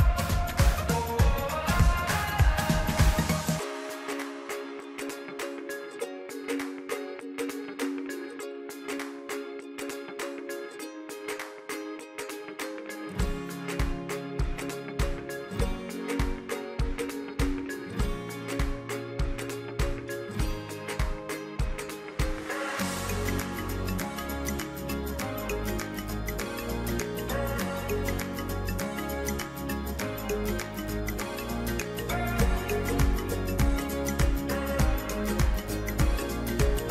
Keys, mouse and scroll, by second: 0.2-1.8 middle drag, 1.8 shift+click, 2.3 shift+click, 2.8 shift+click, 3.7 shift+click, 4.2 shift+click, 4.6 shift+click, 5.4-6.9 middle drag, 6.9 shift+click, 7.3 shift+click, 7.5 middle click, 7.7 shift+click, 7.8 shift+click, 8.0 middle click, 8.3 shift+click, 8.5 shift+click, 9.5 middle click, 10.0 shift+click, 10.4 shift+click, 10.5 shift+click, 10.8 shift+click, 10.9 shift+click, 11.1 middle click, 11.3 shift+click, 11.4 shift+click, 11.6 shift+click, 12.0 shift+click, 12.2 middle click, 12.5 shift+click, 12.6 shift+click, 12.8 shift+click, 13.1 middle click, 13.7 shift+click, 13.8 middle click, 14.1 shift+click, 14.5 shift+click, 14.7 middle click, 14.8 shift+Left, 14.9 shift+Left, 14.9 click, 15.0 shift+Left, 15.2 shift+Left, 15.3 shift+Left, 15.4 shift+Left, 15.4 click, 15.5 middle click, 15.8 shift+click, 15.9 shift+click, 16.0 shift+drag, 16.2 alt+shift+click, 16.3 alt+shift+click, 17.0 middle click, 17.3 shift+drag, 17.9-18.3 middle drag, 19.0-19.7 middle drag, 19.8 shift+click, 20.0 shift+click, 20.2 shift+click, 20.8 middle click, 21.1 shift+drag, 21.2 shift+drag, 21.9 shift+click, 22.0 shift+click, 22.4 shift+click, 22.6 shift+click, 22.7 middle click, 22.9 shift+click, 23.4 shift+click, 23.5 scroll up 1, 23.7 middle click, 23.9 shift+click, 24.0 shift+click, 24.2 shift+click, 24.8 shift+click, 24.9 shift+click, 25.0 middle click, 25.3-25.7 scroll up 4, 25.7 scroll down 3, 25.9 shift+middle click, 26.2 shift+click, 26.4 shift+click, 26.5 middle click, 27.1 shift+click, 27.5 shift+click, 27.6 shift+click, 27.8 middle click, 28.4 shift+click, 28.5 shift+click, 28.7 middle click, 28.8 shift+click, 29.0 middle click, 29.3 shift+click, 29.4 middle click, 29.7 shift+click, 29.8 middle click, 30.2 middle click, 30.5 middle click, 30.9 shift+click, 31.4 middle click, 31.9 middle click, 32.1 shift+click, 32.2 shift+click, 32.6 shift+click, 32.8 shift+click, 32.9 middle click, 33.2 shift+click, 33.5 shift+click, 33.8 middle click, 34.1 shift+click, 34.3-35.4 middle drag, 35.6 shift+click, 35.8 shift+click, 35.9 middle click, 36.4-36.9 middle drag.